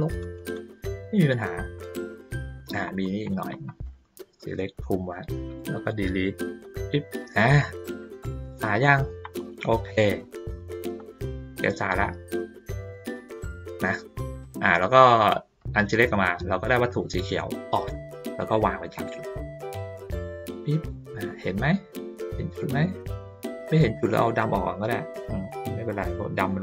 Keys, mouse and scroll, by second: 1.3 ctrl+middle click, 3.1 ctrl+middle click, 3.6 ctrl+middle click, 4.1 click, 7.4 ctrl+middle click, 7.9 ctrl+middle click, 8.4 middle click, 9.1-10.9 ctrl+middle drag, 11.2 middle click, 12.8 click, 14.4 click, 15.9 ctrl+middle click, 15.9-16.2 ctrl+scroll up 1, 16.9 click, 17.9-20.8 drag, 21.2 ctrl+middle click, 22.2 ctrl+middle click, 22.7 middle click, 23.8 click, 24.4-25.5 drag, 25.9 click.